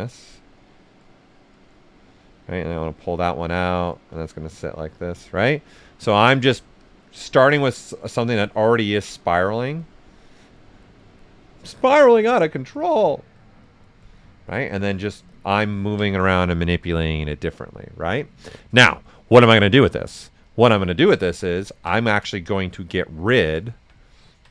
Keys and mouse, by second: 2.5 alt+click, 5.1 right click, 6.8 click, 8.3 right click, 8.8 click, 15.8 ctrl+right click, 16.0 right click, 20.4 click, 20.9 alt+right click, 21.3 right click, 21.9 s, 22.0-23.6 drag, 23.6 alt+right click.